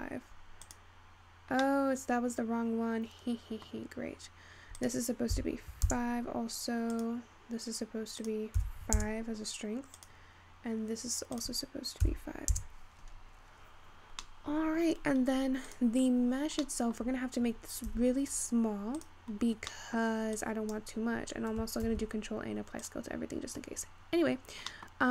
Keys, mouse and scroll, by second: 2.7-5.7 middle drag, 5.7-14.3 drag, 14.3 scroll down 2, 14.5-17.4 middle drag, 17.4-18.3 scroll up 4, 20.8 click, 23.3 ctrl+a, 23.8-24.3 scroll up 5.